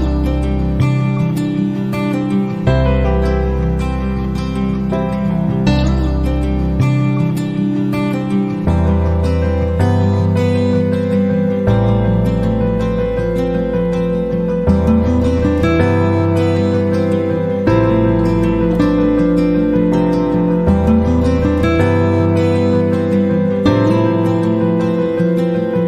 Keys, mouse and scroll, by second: 2.4 right click, 4.6 click, 5.9 click, 6.6 click, 8.0 scroll down 2, 8.8 click, 10.1 click, 12.5 click, 14.1-16.3 drag, 17.2 click, 17.8 click, 19.3 click, 20.4 click, 21.0 middle click, 21.4 click, 22.5 click, 23.3 click, 24.3 click.